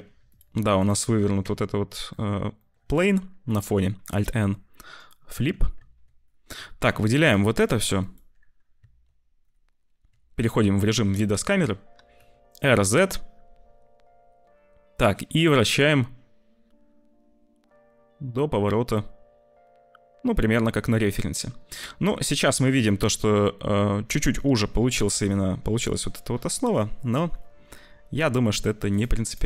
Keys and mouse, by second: 0.1 q, 0.7 click, 1.3 Tab, 2.5 click, 2.7 a, 4.1 alt+n, 5.3 Tab, 5.7 `, 6.9 click, 7.3 click, 8.0 ctrl+click, 10.0 `, 11.9 r, 24.7 r.